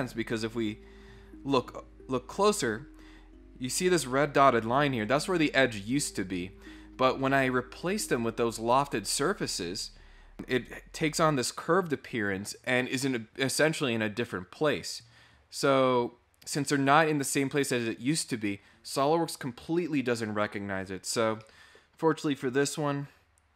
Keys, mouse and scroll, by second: 0.7-1.9 scroll down 3, 15.0 scroll up 1, 21.2 scroll up 2, 21.4 middle click, 22.7 click.